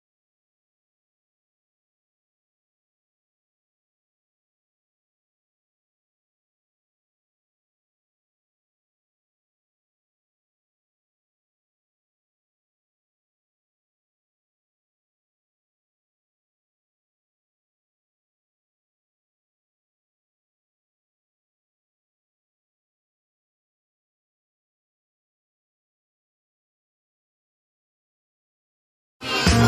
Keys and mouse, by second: 0.4 right click, 1.0 click, 1.3 click, 3.0-3.5 drag, 3.9 click, 4.3 click, 6.2 click, 8.3 click, 13.9 click, 14.5 click, 14.9 click, 15.3-16.1 drag, 18.8-19.1 drag, 20.5 drag, 21.3 click, 22.5 click, 23.5 click, 24.0 click.